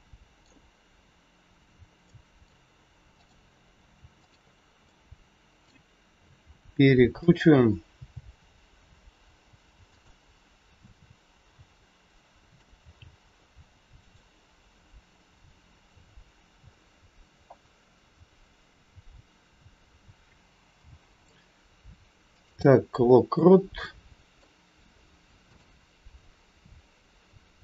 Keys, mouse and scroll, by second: 2.0 middle click, 3.1 click, 4.1 shift+click, 4.9 middle click, 6.7 r, 9.9 g, 10.9 middle click, 12.8 g, 19.8 a, 23.2 middle click, 23.2 i, 25.6 click.